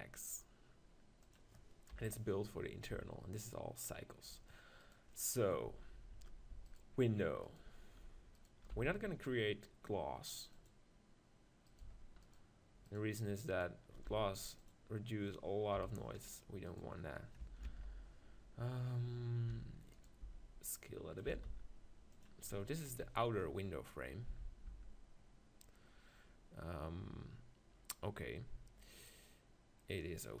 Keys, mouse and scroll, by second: 1.3-3.0 drag, 2.1 KP_1, 2.9 Tab, 5.7 z, 8.7 x, 14.1 x, 15.7 KP_1, 18.2 ctrl+l, 19.5 e, 20.2 s, 21.3 s, 22.2-24.0 middle drag, 24.8 Tab, 29.0-30.4 middle drag.